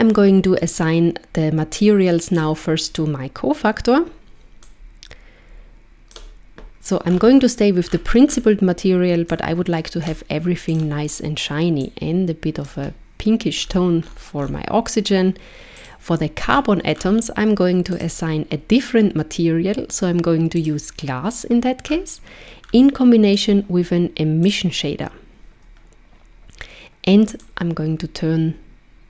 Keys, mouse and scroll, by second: 2.4 click, 4.7 click, 7.1-7.6 scroll down 2, 7.9-8.8 scroll down 6, 8.8-9.3 scroll down 1, 9.3 click, 10.7 click, 13.6-14.7 scroll up 10, 15.8 click, 16.5-17.5 scroll down 6, 18.0 click, 21.8-23.4 scroll down 4, 23.4 click, 23.4-24.6 scroll down 1, 27.5 click.